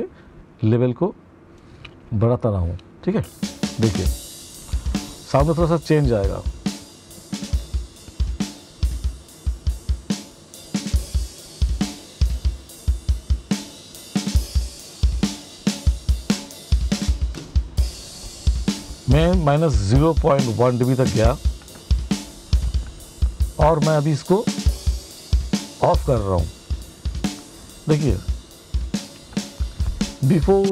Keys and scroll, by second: 2.6 space, 30.1 space.